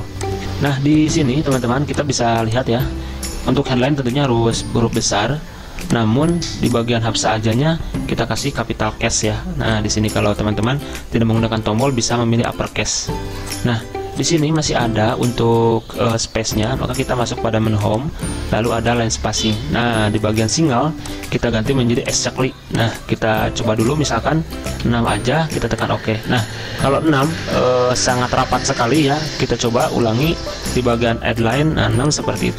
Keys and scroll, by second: 2.8 ctrl+a, 3.7 ctrl+], 4.1 ctrl+], 4.2 ctrl+], 5.0 ctrl+[, 8.3 shift+F3, 8.7 shift+F3, 24.9 6.